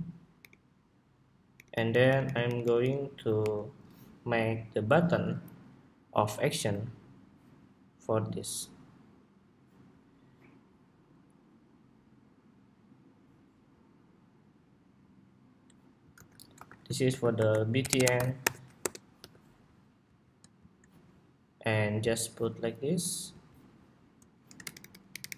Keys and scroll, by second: 0.1 alt+Right, 1.4 alt+Right, 1.6 alt+Right, 1.8 alt+Right, 2.0 alt+Right, 2.2 alt+Right, 2.4 alt+Right, 3.2 alt+Right, 4.3 alt+Right, 15.8 super+g, 16.4 super+r, 24.3 alt+shift+Right, 24.6 alt+shift+Right, 24.8 alt+shift+Right, 25.0 alt+shift+Right, 25.2 alt+shift+Right.